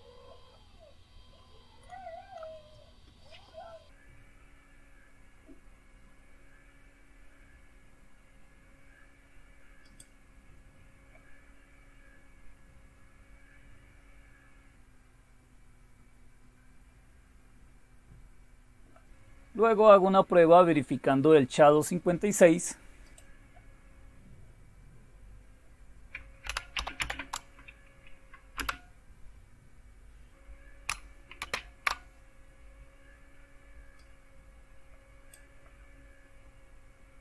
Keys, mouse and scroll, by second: 1.8 click, 9.9 click, 20.5-22.0 scroll down 2, 23.1 click, 24.1 ctrl++, 26.1-30.6 typing, 31.6 shift+super+space, 34.0-35.4 drag.